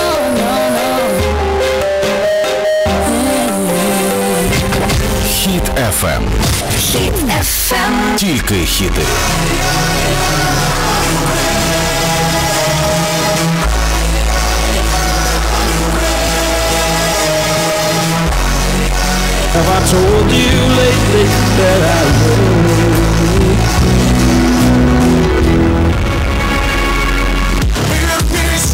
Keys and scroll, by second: 26.2 Page_Down.